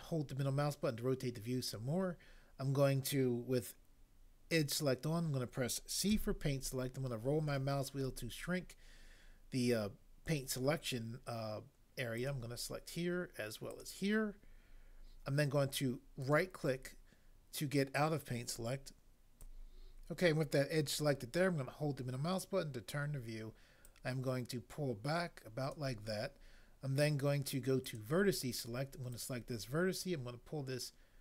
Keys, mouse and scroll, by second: 6.0 c.